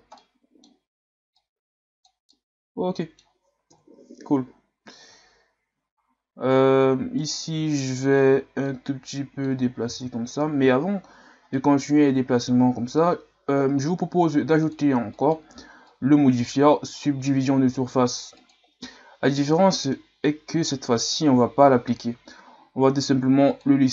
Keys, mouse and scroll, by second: 0.2-1.4 middle drag, 1.4 click, 2.3-3.7 middle drag, 3.7 KP_1, 4.5-5.3 scroll down 4, 5.3-5.8 shift+scroll up 3, 7.2 right click, 8.6-9.9 drag, 9.9 ctrl+z, 10.5 Tab, 11.2-11.5 scroll down 2, 11.5-14.6 middle drag, 14.6 click, 15.1 click, 15.8-16.9 drag, 18.5-19.3 drag, 19.3-22.3 middle drag, 23.5-23.9 drag.